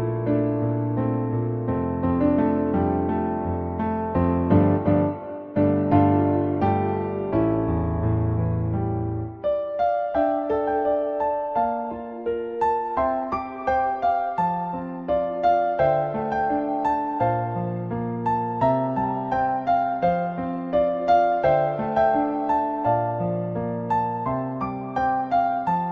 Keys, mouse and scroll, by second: 0.8-3.1 drag, 3.3 middle click, 4.6-5.8 drag, 6.1-6.6 shift+middle drag, 7.4-7.7 shift+middle drag, 9.0-11.9 drag, 12.7 middle click, 14.7-16.5 drag, 16.6-17.2 middle drag, 17.9 middle click, 18.7 shift+middle click, 22.4-24.0 drag, 24.5-25.9 middle drag.